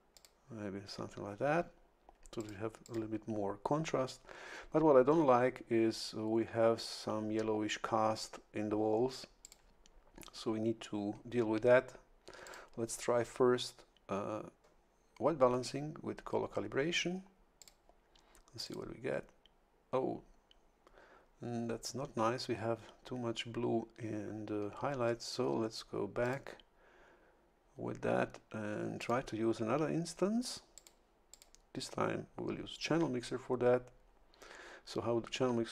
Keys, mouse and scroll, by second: 0.1 click, 2.4 click, 2.8 click, 9.4 click, 12.4 click, 17.6 click, 18.6 click, 26.2 click, 29.0 click, 30.7 click, 31.3 click.